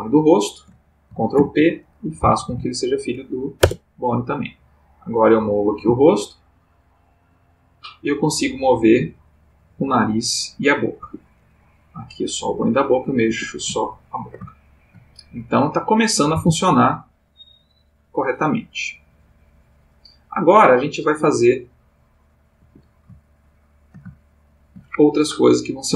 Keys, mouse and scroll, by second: 1.3 ctrl+p, 3.6 Return, 4.9 click, 5.8 g, 11.0 Escape, 12.0 click, 12.4 g, 13.3 Escape, 13.9 ctrl+middle click, 14.7 ctrl+shift+middle click, 15.6 click, 16.4 r, 22.6 Escape, 23.2-24.9 ctrl+middle drag.